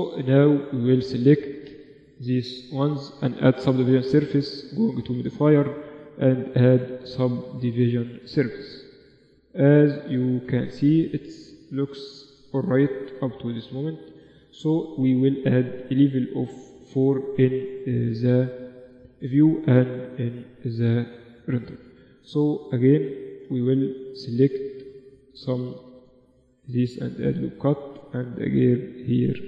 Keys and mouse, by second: 1.9 click, 1.9 ctrl+Up, 4.1-6.0 drag, 6.0-13.5 middle drag, 13.5-17.9 drag, 17.9-19.3 middle drag, 19.3 t, 20.5-22.1 drag, 20.7 t, 22.3-25.7 middle drag, 22.6 Tab, 23.7 z, 23.9 z, 24.6 z, 25.2 ctrl+r, 27.2 ctrl+r, 28.5 Tab, 28.6 z.